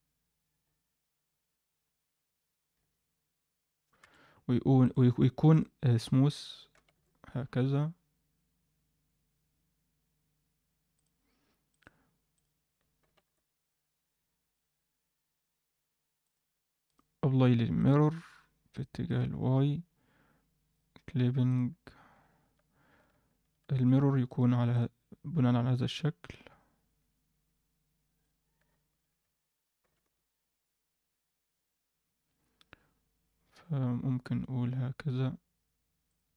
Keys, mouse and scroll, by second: 4.8-6.1 drag, 6.7 g, 11.6-12.5 drag, 13.0 g, 16.8-17.8 drag, 18.7 drag, 19.0 click, 21.4 click, 24.2 click, 26.2 Tab, 26.9 Tab, 28.1 click, 29.2 a, 29.8 g, 36.2 Tab.